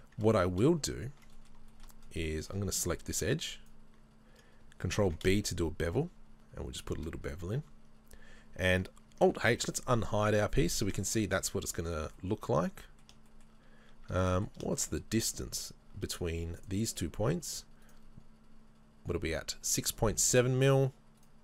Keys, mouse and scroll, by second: 2.0-2.9 scroll up 2, 3.5-5.4 alt+right drag, 5.0 ctrl+b, 7.2 scroll down 2, 7.4 Tab, 9.5 alt+h, 10.0-14.1 middle drag, 13.7-14.1 scroll up 2, 14.1 Tab, 14.7 middle click, 14.8 shift+middle click, 15.1-15.7 scroll up 1, 16.6-18.9 drag, 18.9-21.4 right drag.